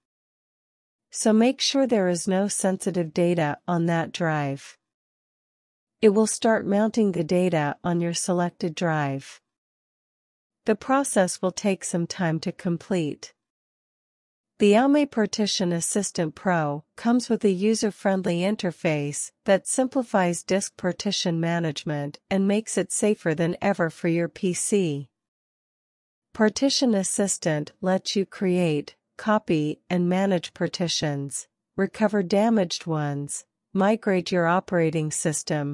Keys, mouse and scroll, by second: 5.8 click.